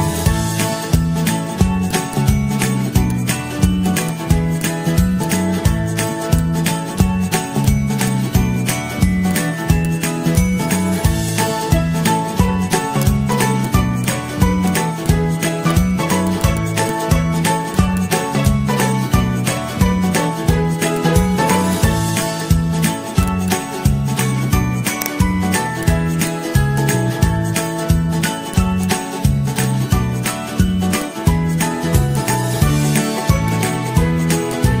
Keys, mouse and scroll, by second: 2.8 d, 7.7-8.9 z, 9.0 z, 13.8 ctrl+z, 14.3 ctrl+-, 15.5 i, 16.5 click, 16.7 click, 17.2 ctrl+c, 17.5 ctrl+f, 18.2 ctrl+z, 19.0 d, 19.9 ctrl+[, 20.8 z, 22.7 ctrl+z, 27.0 ctrl+], 27.9 ctrl+], 30.4 ctrl+z, 30.4 Pause, 31.4 ctrl+shift+], 33.0 ctrl+shift+].